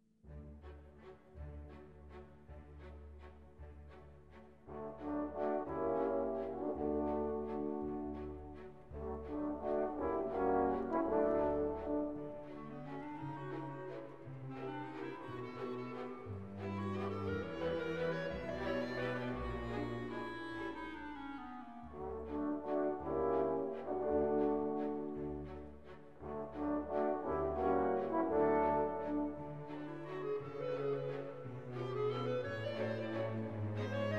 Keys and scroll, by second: 9.7 ], 30.9 ctrl+u.